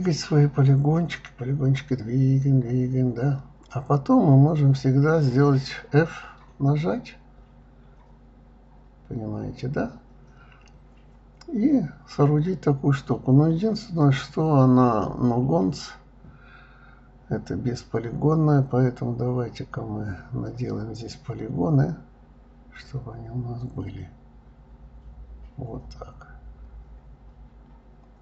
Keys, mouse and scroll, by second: 0.4-1.8 middle drag, 1.8 shift+click, 2.6-3.3 drag, 3.3 click, 3.8 middle click, 4.6 s, 6.2-7.8 middle drag, 9.0-10.0 middle drag, 10.0 f, 10.3 click, 10.5-11.3 middle drag, 11.3-12.9 scroll up 1, 14.7 click, 16.0 k, 25.1 click, 26.2 k.